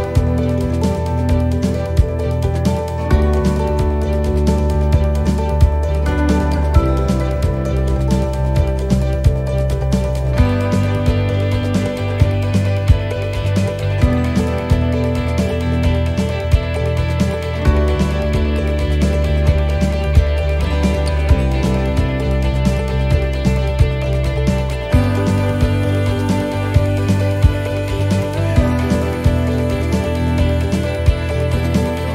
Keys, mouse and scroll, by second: 4.8 middle click, 6.0 shift+d, 7.0 click, 9.1 r, 12.1 shift+d, 13.2 click, 14.7 middle click, 15.3 shift+middle click, 16.3 click, 24.6 shift+d, 25.6 click, 28.2 s, 31.3 click.